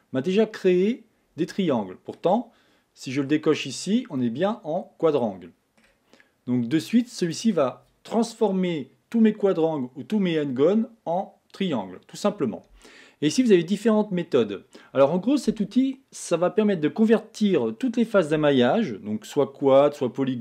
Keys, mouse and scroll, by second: 1.6-3.6 middle drag, 3.6 click, 4.2-7.2 middle drag, 7.2 click.